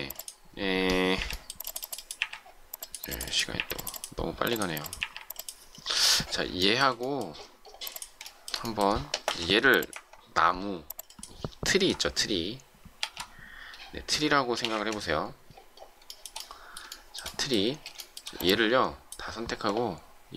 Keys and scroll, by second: 1.1 Delete, 2.1 Delete, 3.5 Delete, 4.9 Delete, 9.2 shift+m, 14.3-15.1 typing, 17.6 shift+space.